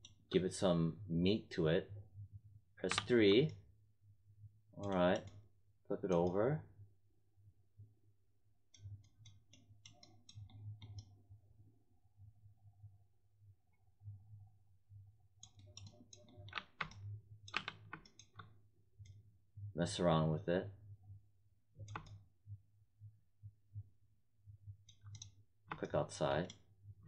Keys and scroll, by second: 2.8 3, 16.5 1, 17.5 3.